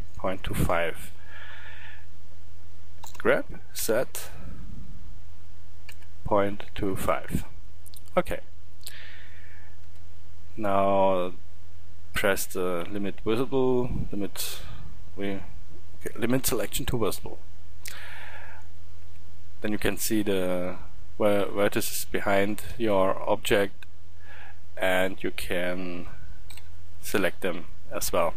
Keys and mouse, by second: 3.0 g, 8.8 middle click, 9.9 a, 13.4-18.2 middle drag, 18.2 a, 19.1 a, 26.5 b.